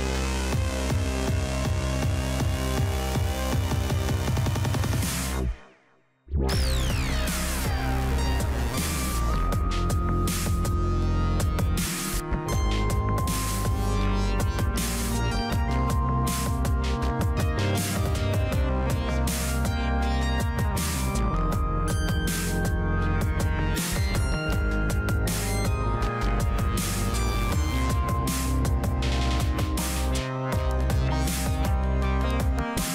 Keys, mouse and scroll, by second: 16.6-17.6 right drag, 19.3 click.